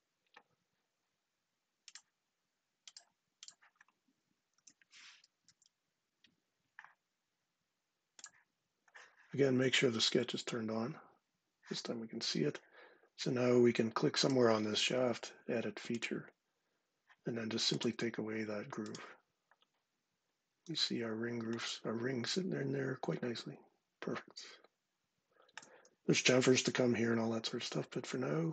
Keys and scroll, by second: 4.3 super+v, 5.1 Return.